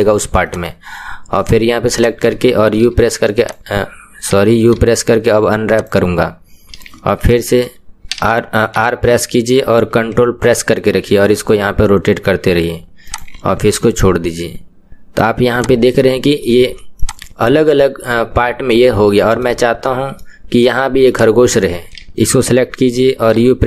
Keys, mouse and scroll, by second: 0.6 click, 1.5 click, 3.5 u, 5.8 u, 8.8 r, 13.8-15.6 middle drag, 15.6 click, 15.9-17.0 middle drag, 17.0 click, 17.5-21.1 middle drag, 21.1 click.